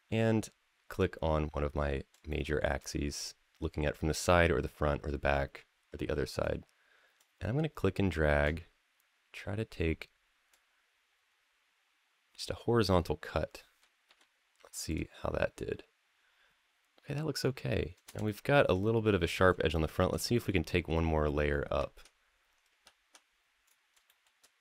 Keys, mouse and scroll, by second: 0.7 click, 2.1 shift+middle click, 7.0-10.3 drag, 13.8 x, 17.2 scroll up 2, 18.1 shift+middle click, 19.5 shift+middle drag, 20.1 middle click, 22.6 `, 23.4-23.8 scroll down 1, 23.9 shift+middle click.